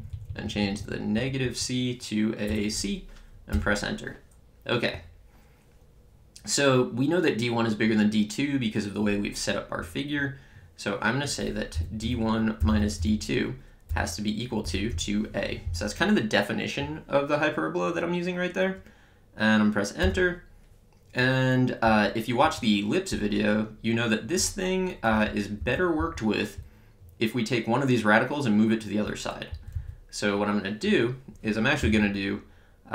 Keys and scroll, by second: 2.5 BackSpace, 3.6 Return, 11.8-14.9 typing, 20.1 Return, 21.9 Up, 22.5 Right, 25.2 Down, 25.6 Up, 26.0 Left, 26.6 Right, 29.5 Down, 31.8 d.